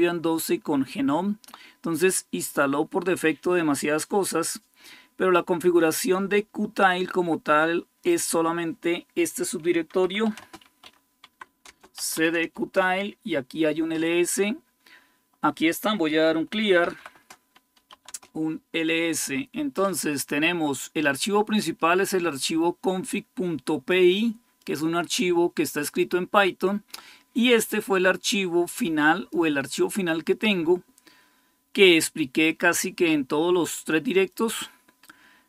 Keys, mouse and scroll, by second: 6.7-8.3 drag, 9.8-12.2 typing, 11.4 Return, 12.3 Return, 15.8-18.0 typing, 21.4-33.1 drag, 23.9-24.6 typing.